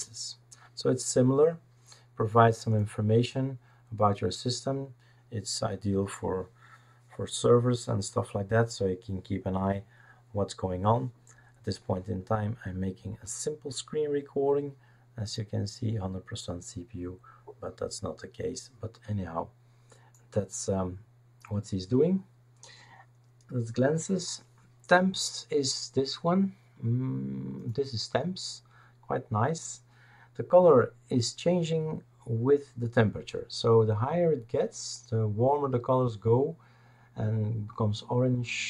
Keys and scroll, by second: 0.0-0.2 typing.